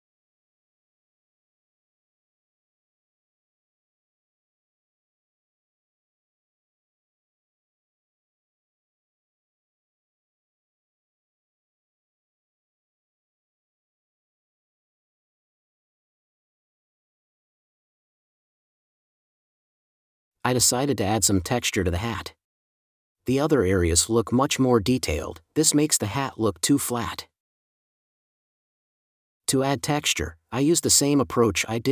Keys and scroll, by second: 4.6 space, 6.0 space, 8.2 n, 13.7 space, 16.2 space, 17.5 super+space, 18.6 super+s, 18.9 shift+super+n, 20.3 space, 21.6 space, 24.1 space, 26.0 space, 29.0 space, 31.2 space.